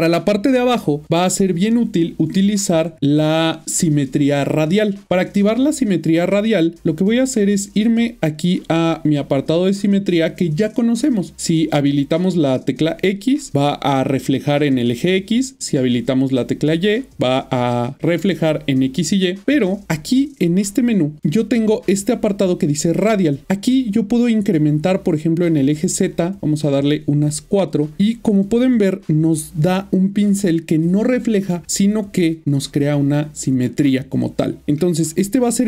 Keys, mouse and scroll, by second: 5.0 click, 12.6 click, 15.8 click, 19.7 click, 19.8 double click, 20.2 click, 25.1 click, 34.6 shift+middle click.